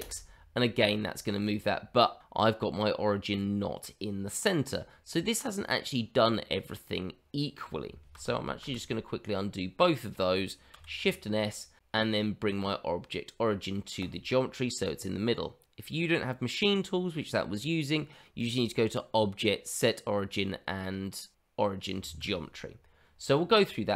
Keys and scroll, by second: 8.3 ctrl+z, 8.7 ctrl+z, 10.7 shift+s.